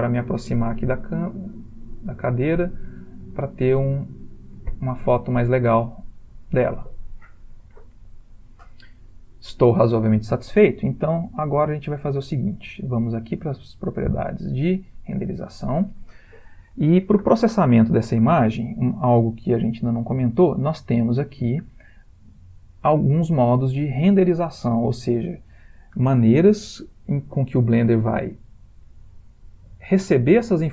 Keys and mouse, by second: 0.5 ctrl+middle click, 4.7 ctrl+middle click, 13.6 click, 22.4 click.